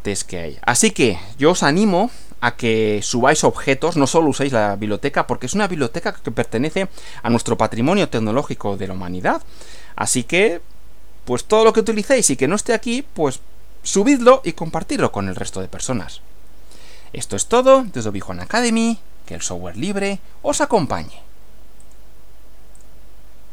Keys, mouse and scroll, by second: 21.8 click, 22.8 click.